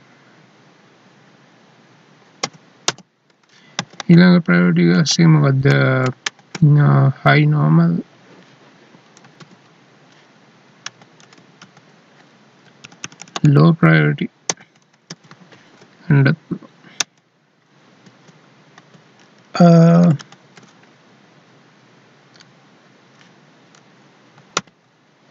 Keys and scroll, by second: 2.4 ctrl+k, 3.8 Up, 4.9 Left, 6.9 ctrl+shift+Left, 9.5 alt+e, 10.9 Left, 11.2 Right, 11.6 Left, 16.9 Right, 18.0 Down, 19.2 Left, 20.2 ctrl+shift+Left, 24.7 alt+e.